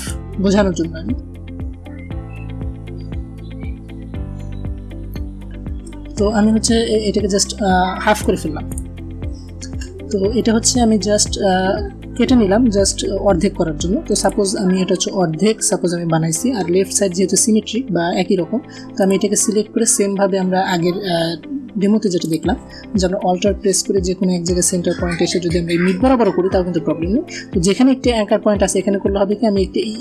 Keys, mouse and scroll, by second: 0.4-1.7 drag, 2.4-4.2 alt+drag, 4.8 a, 5.0 click, 8.0 click, 13.8 click, 18.5 click, 21.8 click.